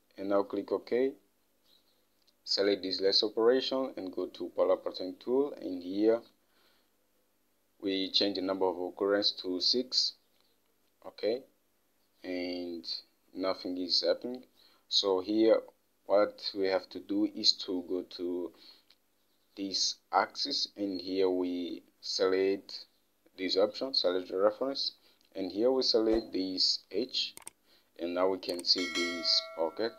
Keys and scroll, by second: 10.0 6.